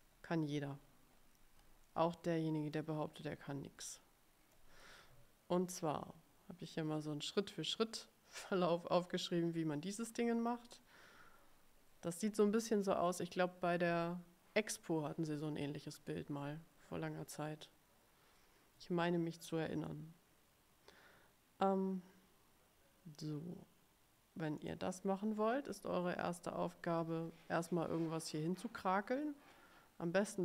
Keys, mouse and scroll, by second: 0.2-1.5 ctrl+scroll down 7, 2.0 click, 2.2 middle click, 2.2 click, 2.4 middle click, 2.4 click, 2.6 middle click, 3.0 ctrl+click, 3.2-3.8 ctrl+scroll up 1, 4.1 click, 4.4 middle click, 24.7 click, 26.3 click.